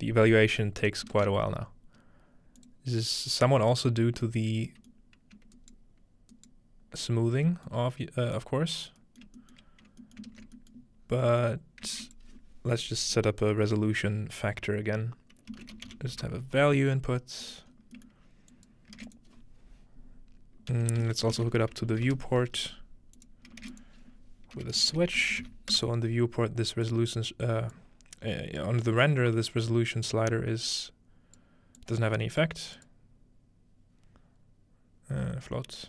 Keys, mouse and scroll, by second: 0.8 ctrl+right click, 2.6 click, 3.9 middle click, 4.4-6.3 shift+middle drag, 7.5-9.9 middle drag, 9.2-11.1 scroll up 1, 10.4 ctrl+space, 11.1-12.1 scroll down 1, 12.0 typing, 12.1-13.3 shift+drag, 15.5-16.6 typing, 17.4 click, 17.7 scroll up 2, 18.5 click, 19.0-20.6 shift+drag, 19.0-19.7 shift+scroll up 1, 19.0 shift+a, 20.7-22.4 typing, 23.2 click, 23.5-24.6 scroll up 1, 23.7 shift+a, 23.7 shift+click, 24.7-25.9 typing, 26.8 click, 27.7-28.6 drag, 28.9 click, 30.7 click, 31.8 click, 32.8 click.